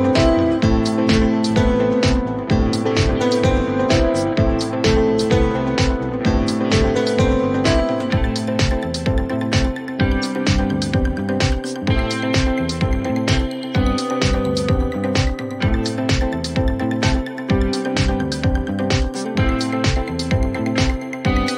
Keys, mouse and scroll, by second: 0.6-1.1 scroll, 1.2 scroll, 2.9 click, 3.9 click, 4.7-5.8 drag, 4.7-6.0 typing, 8.5-10.9 drag, 9.2 typing, 9.7 Return, 10.9 typing, 12.4-13.9 scroll, 15.6 click, 18.7 click, 19.0-19.9 typing, 21.1 typing.